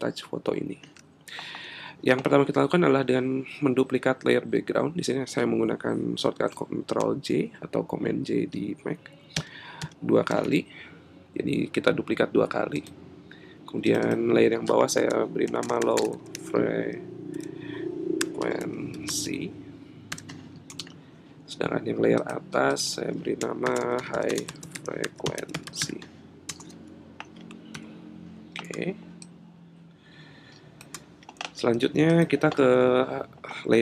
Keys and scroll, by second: 9.3 super+j, 15.4 shift+l, 19.7 typing, 20.7 Return, 23.6 shift+h, 26.5 Return, 27.7 super+-.